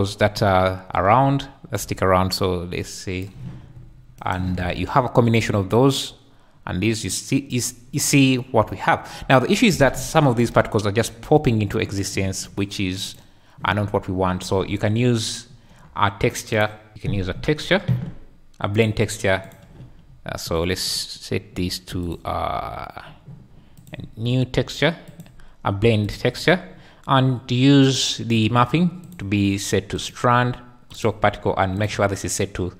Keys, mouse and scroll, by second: 1.7-3.2 shift+drag, 4.3 shift+click, 4.6 space, 9.7 space, 10.6-12.1 shift+drag, 13.0 click, 16.5 click, 19.4 click, 20.8-21.4 drag, 22.0 click, 25.1-26.1 drag, 27.8-28.3 drag, 29.0-30.1 drag, 30.9 click, 31.8 click.